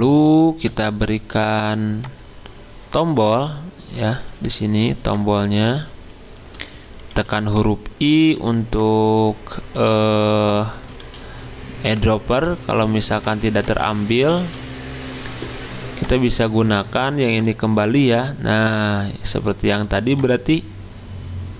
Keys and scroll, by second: 7.2 i, 11.0 ctrl+z, 14.4 ctrl+z.